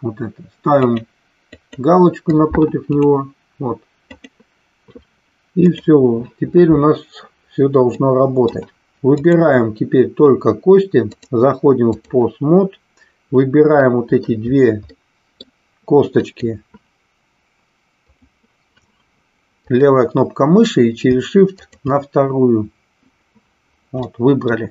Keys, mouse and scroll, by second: 8.0-8.5 middle drag, 11.1-12.1 drag, 13.7-14.2 middle drag, 14.9-15.5 middle drag, 16.1-17.6 drag, 19.7 click, 21.6 shift+click, 24.0-24.5 middle drag.